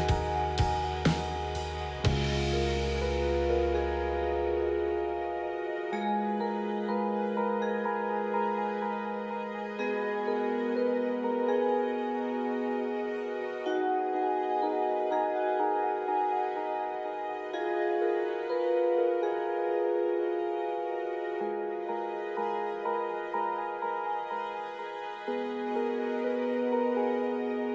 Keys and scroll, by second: 0.1 shift+a, 10.5 shift+z.